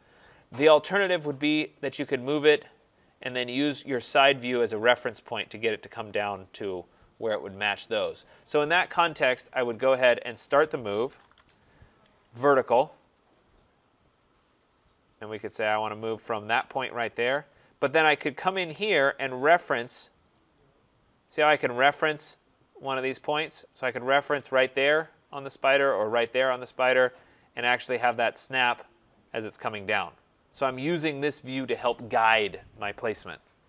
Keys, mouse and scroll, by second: 1.4 scroll, 1.5 click, 1.8 click, 2.7-4.2 scroll, 4.2-6.8 scroll, 10.1 click, 10.6-11.6 typing, 13.0 click, 14.5-14.9 scroll, 15.3 scroll, 16.8 click, 17.1 scroll, 28.2 click.